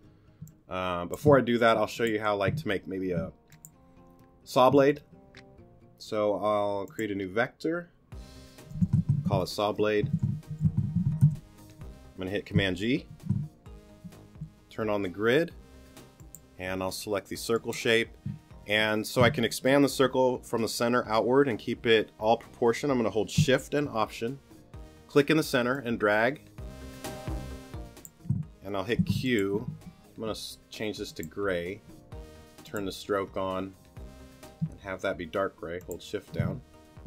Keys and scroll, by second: 0.4 space, 8.5-9.5 typing, 11.2 Return, 13.1 super+g, 28.9 alt+shift+q.